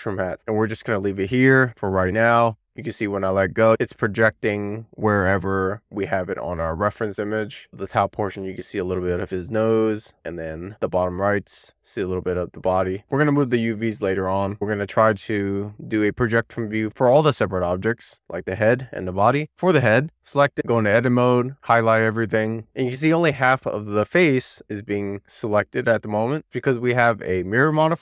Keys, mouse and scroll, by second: 17.3 Tab, 18.5 a.